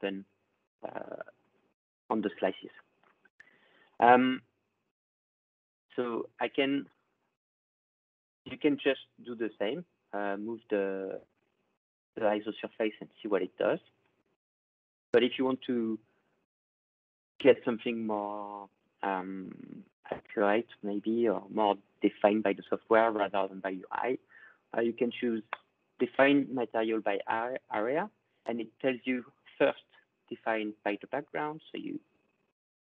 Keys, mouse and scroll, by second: 1.0 scroll, 1.6-2.2 scroll, 2.8 scroll, 4.3 ctrl+scroll, 5.8 click, 8.2 scroll, 11.4-12.8 scroll, 13.8-19.0 drag, 25.8-28.3 drag.